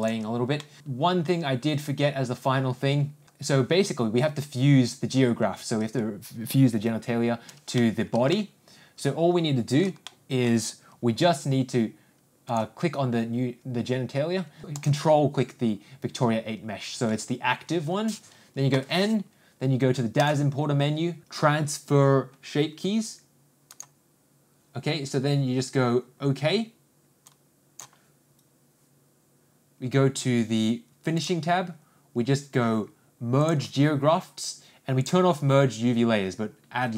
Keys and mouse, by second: 0.6 alt+middle click, 3.2 middle click, 3.2 shift+n, 8.2 middle click, 8.7-10.4 shift+middle drag, 10.5 middle click, 19.2 n, 20.6 click, 24.2-29.4 drag, 33.8-36.9 drag.